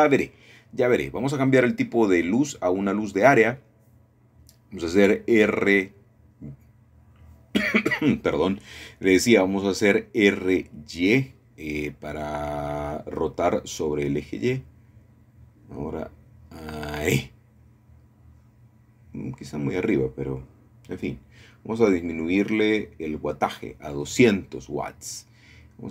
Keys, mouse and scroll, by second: 0.0 click, 3.0 click, 5.7 middle click, 6.7 r, 8.2 x, 9.7 Escape, 10.3-11.3 scroll down 2, 11.1 shift+middle click, 15.1 middle click, 15.9 r, 16.2 y, 19.7-20.8 drag, 21.4 shift+middle click, 22.1 shift+middle click, 24.1-25.2 drag, 25.2 KP_2, 25.7 KP_0, 25.8 KP_0.